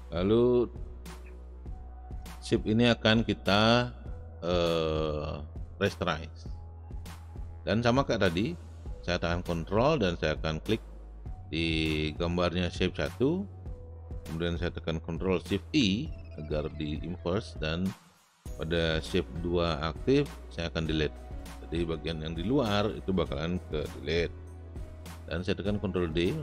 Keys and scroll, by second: 15.7 ctrl+shift+i, 20.9 Delete, 25.8 ctrl+d.